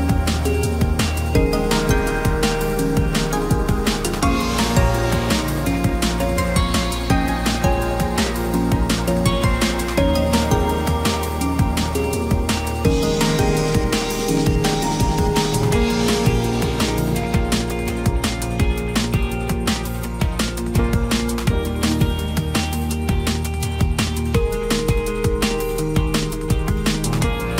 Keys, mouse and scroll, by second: 13.5 ctrl+t, 16.0 right click, 24.5 Left, 26.0 Up.